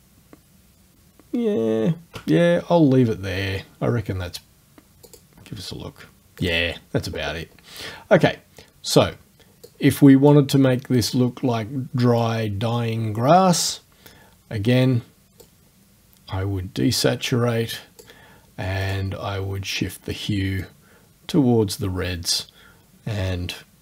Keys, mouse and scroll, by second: 1.3 shift+scroll up 1, 5.1 click, 6.4 click, 8.7 scroll up 1, 9.7 click, 12.2-13.8 drag, 15.4-18.2 drag, 18.9 click, 20.7-23.8 drag.